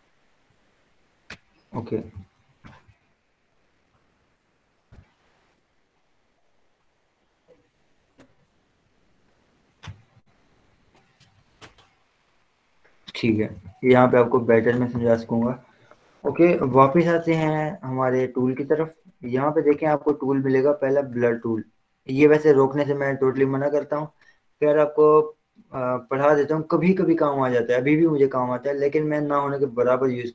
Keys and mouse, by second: 0.2-2.2 drag, 2.2 ctrl+j, 3.3 click, 3.9 ctrl+0, 4.5 ctrl+j, 4.9 ctrl+o, 7.9 click, 13.8 ctrl+0, 15.2 ctrl+j, 16.8 z, 18.0 click, 19.9 right click, 21.3 click.